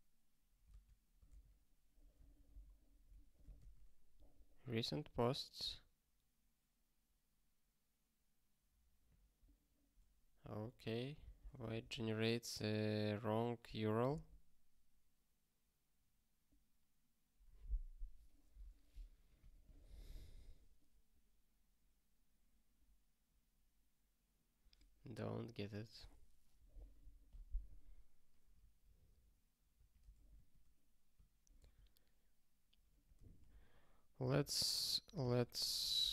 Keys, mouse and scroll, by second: 10.4 ctrl+k, 14.1 ctrl+k, 29.7 super+o.